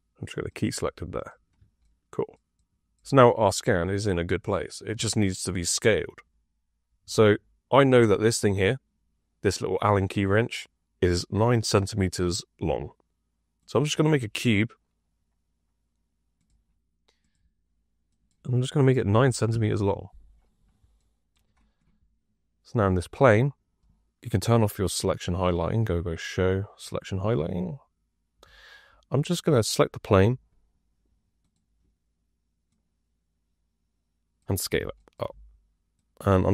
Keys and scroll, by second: 19.0 KP_9, 19.4 Return, 30.1 r.